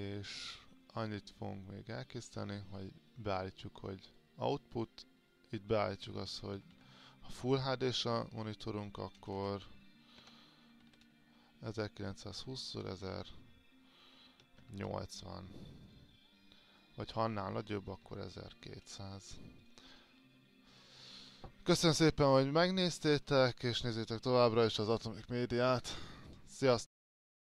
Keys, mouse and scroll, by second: 2.1-5.2 drag, 6.8 KP_1, 6.9 KP_2, 9.4 BackSpace, 10.4 n, 12.2-13.4 drag, 14.7 KP_0, 14.8 KP_8, 16.0 click, 18.2 KP_2, 18.7 KP_0, 19.8 click.